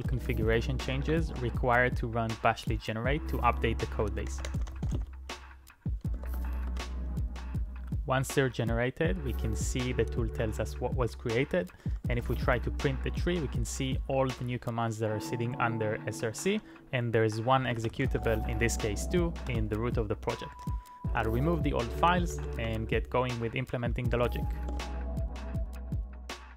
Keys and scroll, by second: 0.1 Return, 0.9 ctrl+a, 1.3 typing, 4.1-5.4 typing, 6.2 ctrl+e, 6.7 Return, 11.9-12.7 typing, 17.3-19.3 typing, 18.8 Return, 19.5 Return, 22.0-22.9 typing.